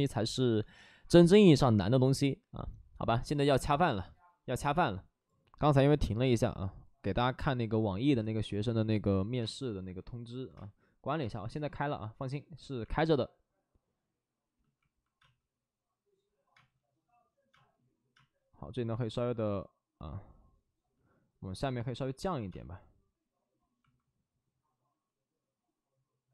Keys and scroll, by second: 5.2 space, 9.3 space, 10.4 space, 15.1 space, 16.5 space, 17.4 space, 18.0 space, 22.4 space.